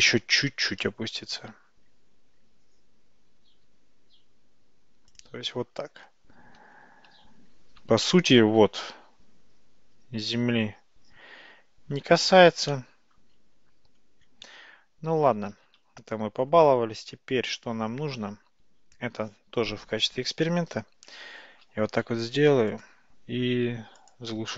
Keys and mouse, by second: 3.5 r, 8.1-8.7 shift+middle drag, 12.8-13.3 shift+middle drag, 15.6 ctrl+z, 15.9 ctrl+z, 21.8 shift+d, 24.0 click.